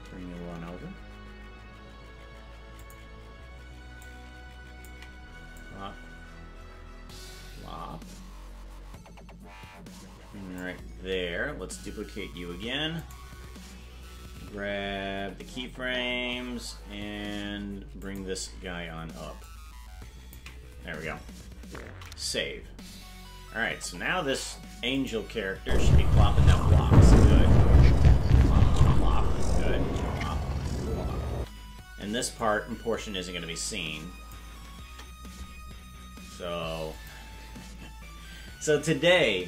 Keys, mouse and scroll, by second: 0.5 g, 4.0 ctrl+click, 5.6-10.6 drag, 12.6 shift+d, 14.4 g, 19.4 ctrl+click, 24.6 ctrl+s, 25.0 click, 25.6 space, 31.3 space, 32.4-34.4 drag, 34.8 KP_0, 37.0 click.